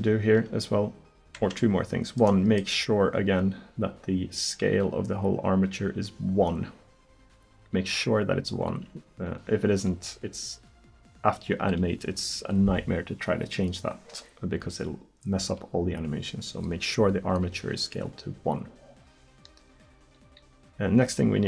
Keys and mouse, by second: 1.4 Tab.